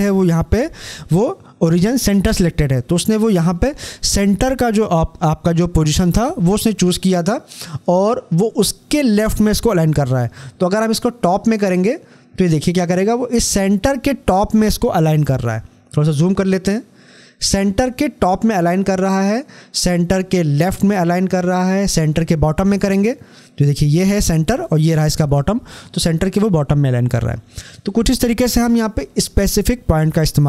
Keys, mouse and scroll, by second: 12.3 click, 15.4 scroll up 1, 19.6 click, 22.4 click.